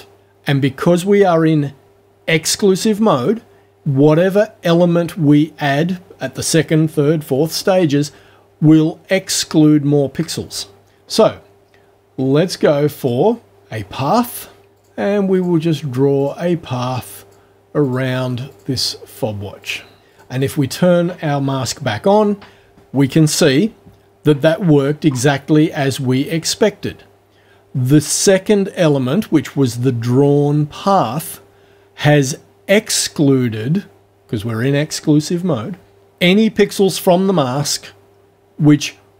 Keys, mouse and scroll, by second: 13.0 click, 14.8 click, 15.3 click, 16.2 click, 17.2 click, 17.8 click, 18.5 click, 19.1 click, 19.2 click, 19.4 click, 19.5 click, 19.6 click, 19.7 click, 19.9 click, 20.0 click, 20.1 click, 20.4 click, 20.5 click, 20.6 click, 21.0 click, 21.0 right click.